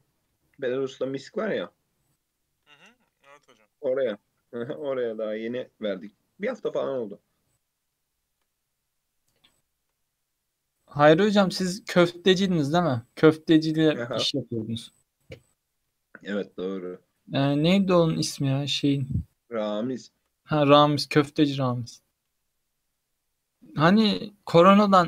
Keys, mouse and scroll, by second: 0.5 shift+middle click, 0.9 click, 1.6 Tab, 1.9 scroll up 2, 2.4 shift+middle click, 3.0 ctrl+r, 4.1 3, 4.3 alt+z, 4.8 click, 8.1-12.6 shift+middle drag, 13.3 1, 13.9 click, 15.7 g, 19.4 3, 20.1 shift+click, 21.4 shift+middle click, 22.0 e, 24.8 shift+middle click.